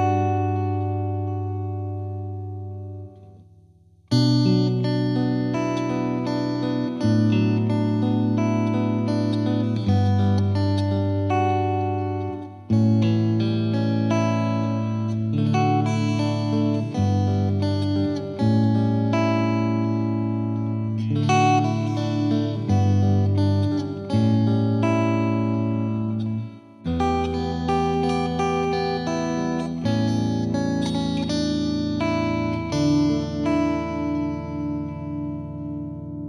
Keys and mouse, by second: 7.0 Return, 15.0-16.6 drag, 17.7 ctrl+t, 22.0 ctrl+click, 31.6 ctrl+click, 36.1 Return.